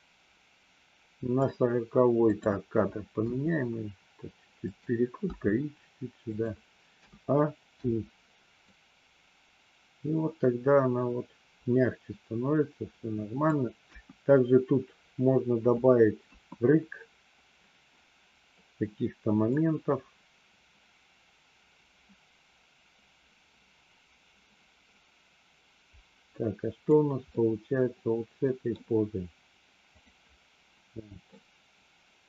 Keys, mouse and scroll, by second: 2.3 click, 3.2 r, 5.2 g, 7.0 a, 7.7 i, 8.7-13.4 drag, 13.7 KP_1, 19.4-26.9 drag, 27.3-28.7 middle drag, 31.3-32.2 middle drag.